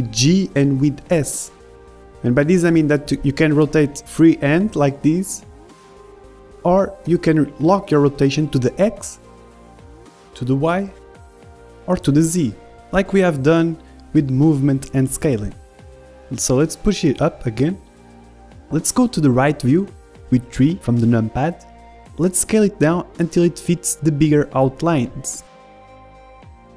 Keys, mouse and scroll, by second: 1.1 r, 3.7-5.5 middle drag, 4.6 r, 6.8-7.9 middle drag, 7.1 r, 7.9 click, 8.5 r, 16.0 KP_1, 16.4-17.8 middle drag, 17.8-19.8 drag, 21.1 KP_3, 22.1-24.2 middle drag, 22.1-22.6 scroll up 1, 24.2-26.6 middle drag, 26.2 s.